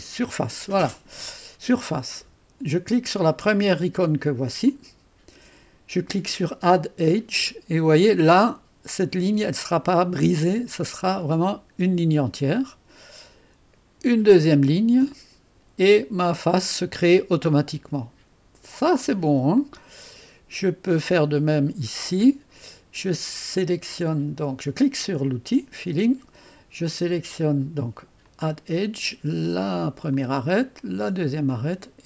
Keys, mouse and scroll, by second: 0.0 click, 1.8 click, 4.7 click, 6.7 click, 11.3 click, 14.8 click, 15.9-17.9 drag, 18.1 click, 18.8 click, 19.6-21.1 drag, 25.3 click, 28.3 click, 30.1 click, 31.5 click.